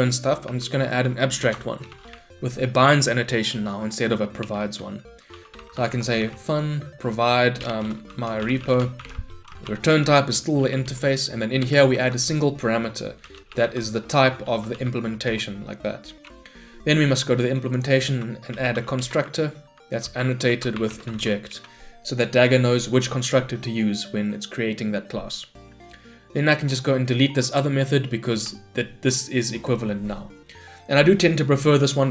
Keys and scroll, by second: 4.6 Return, 10.9 Return, 15.3 Return.